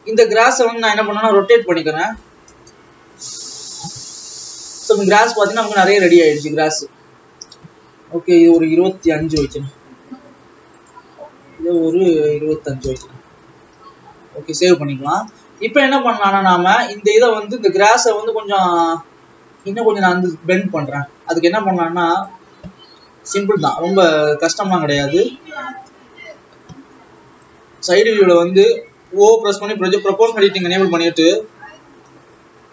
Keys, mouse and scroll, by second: 0.5 scroll down 1, 1.4 r, 3.3 scroll up 2, 4.3 alt+a, 4.5 click, 8.4-11.0 drag, 11.9-13.7 drag, 13.7 alt+a, 14.4 ctrl+s, 15.2 click, 16.2-19.1 drag, 19.9 Tab, 22.4-25.1 drag, 25.1 KP_3, 26.4-26.9 scroll up 3, 27.5-29.2 drag, 29.2 o, 30.2-31.7 drag, 31.7 g.